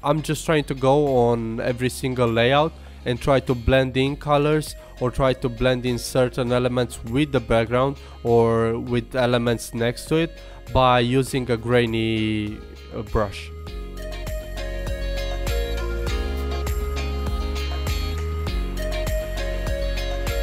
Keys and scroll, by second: 19.2 super+z, 19.5 super+z.